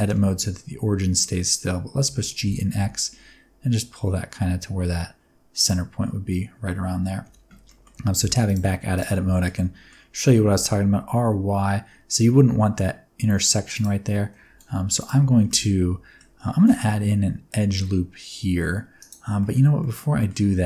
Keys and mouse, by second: 2.0 g, 2.4 x, 5.5 click, 7.2 Tab, 7.6 middle drag, 8.1 alt+a, 8.4 click, 8.9 click, 9.3 shift+middle click, 9.5 middle click, 10.2 r, 10.5 y, 13.6 click, 14.4 ctrl+z, 14.9 click, 15.1 Tab, 15.4 middle click, 16.5 ctrl+r, 19.3 middle click, 19.7 middle click.